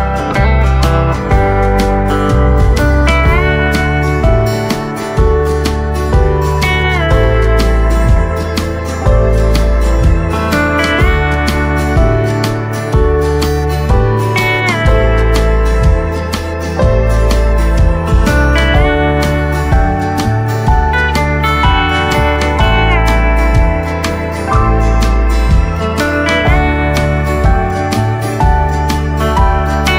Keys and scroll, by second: 0.0 v, 1.8 space, 2.1 v, 6.3 shift+space, 7.0 shift+v, 9.5 ctrl+2, 10.5 space, 10.9 space, 12.7 Tab, 14.3 space, 14.8 space, 19.5 v, 27.0 v, 27.3 space, 28.4 v, 29.4 space, 29.8 v.